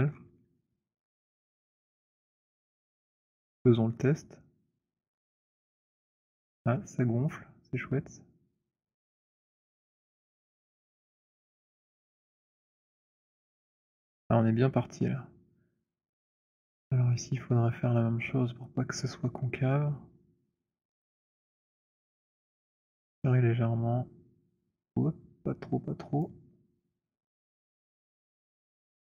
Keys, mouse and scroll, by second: 0.0 middle click, 1.0 alt+middle click, 1.3 middle click, 1.5 middle click, 2.2 alt+middle click, 2.5 alt+middle click, 2.5-3.1 scroll, 9.4 click, 9.9-11.6 scroll, 12.0-13.8 scroll, 15.9 alt+click, 16.4 alt+middle click, 16.4-18.9 scroll, 18.9 click, 26.1 click, 26.9 z.